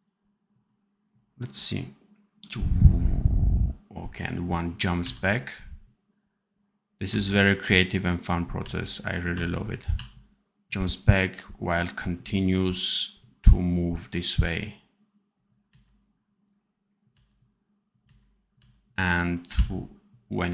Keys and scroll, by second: 4.9 v, 7.0 c, 8.5 v, 9.2 c, 9.8 v, 15.6 c, 17.0 v, 18.0 c, 18.5 v.